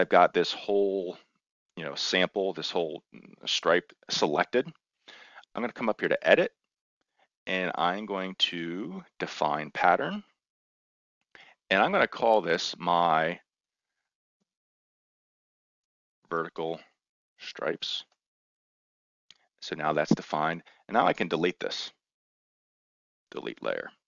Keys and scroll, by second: 13.8-18.3 typing.